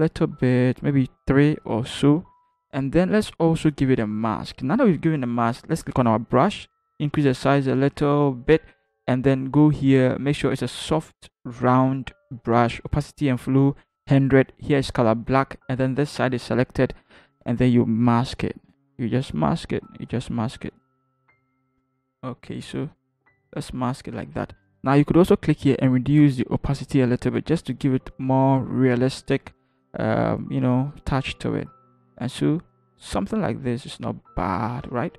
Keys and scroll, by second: 6.9-7.9 typing, 21.7-22.8 typing.